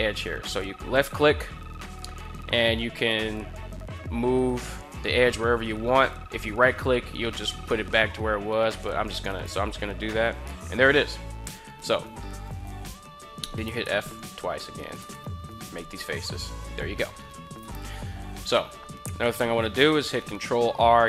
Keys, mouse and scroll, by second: 9.0 right click, 12.3 right click, 13.4 f, 13.6 f, 14.5 right click, 14.7 f, 15.0 f, 15.9 middle drag, 17.4 KP_1, 19.3 ctrl+r.